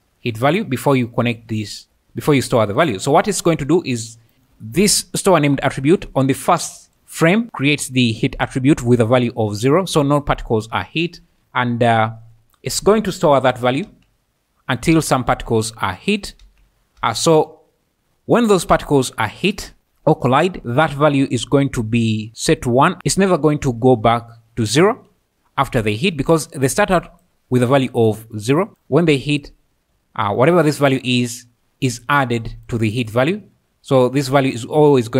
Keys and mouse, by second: 0.0-35.1 typing, 0.4 click, 1.1 drag, 2.4 click, 3.9 click, 4.3 middle click, 4.8 click, 7.9 click, 11.4 Right, 22.6 click, 30.2 click, 32.2 click.